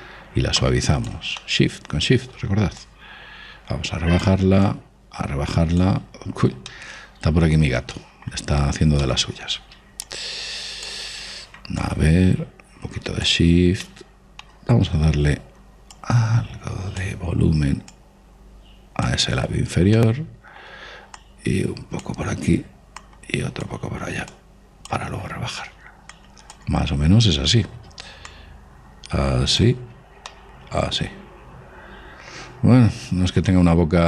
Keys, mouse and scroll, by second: 2.0-3.4 middle drag, 3.4-7.1 drag, 6.7-11.5 middle drag, 10.7-14.2 drag, 14.3-16.6 middle drag, 16.6 click, 18.5 click, 20.6-22.3 middle drag, 21.8-28.6 drag, 27.6-32.8 middle drag, 28.9 click.